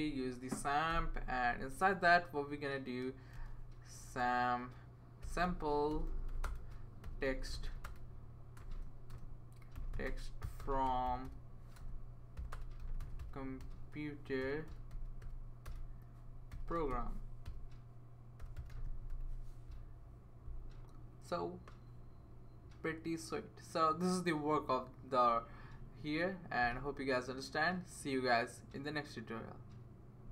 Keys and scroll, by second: 0.0-0.4 typing, 0.9 Return, 3.3-3.9 typing, 5.0-19.6 typing.